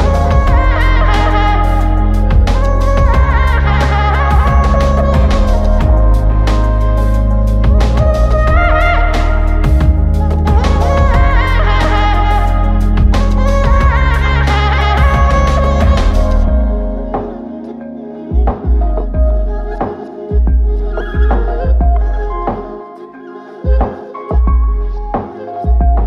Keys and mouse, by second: 1.7 ctrl+alt+click, 3.7 shift+click, 5.3 alt+click, 8.4 ctrl+alt+click, 11.8 double click, 15.3 shift+click, 16.2 double click, 17.2 shift+click, 18.1 shift+click, 18.5 alt+click, 21.0 alt+click, 22.1 double click, 25.2 shift+click.